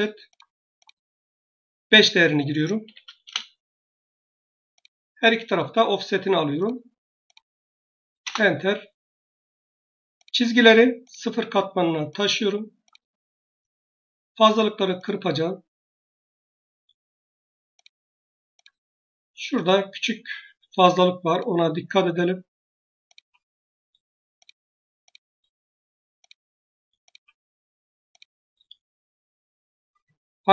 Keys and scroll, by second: 2.7 5, 3.1 Return, 13.6 Escape.